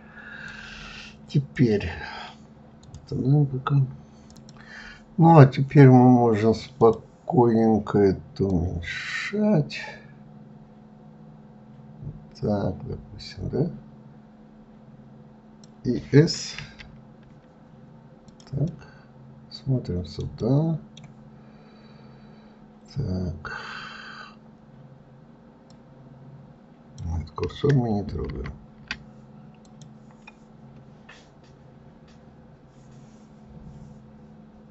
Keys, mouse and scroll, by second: 6.7 drag, 8.4 click, 18.6-23.4 middle drag, 25.6-28.1 drag, 28.1 ctrl+z, 29.6 click.